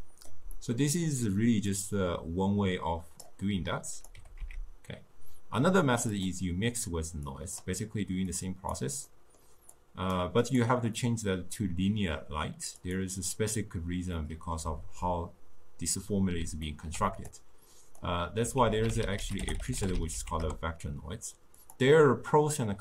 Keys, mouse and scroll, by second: 1.8-4.1 drag, 4.2 g, 7.4-8.4 drag, 9.1 middle click, 9.8-13.6 drag, 14.3-14.9 middle drag, 16.7-17.4 ctrl+middle drag, 17.4-18.7 drag, 18.7 ctrl+a.